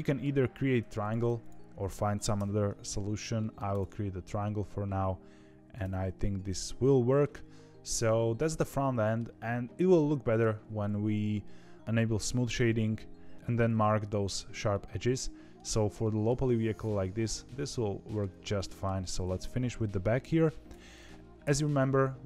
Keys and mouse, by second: 2.3 f, 3.3 middle click, 3.6 click, 4.3-5.7 middle drag, 5.8 Tab, 6.3 middle click, 8.1 shift+middle click, 8.6 middle click, 11.4 middle click, 12.6 middle click, 14.6 middle click, 15.9 shift+middle click, 17.6 middle click, 18.4 shift+middle click, 20.6 Tab, 21.2 KP_3, 21.3 KP_7, 22.0 z.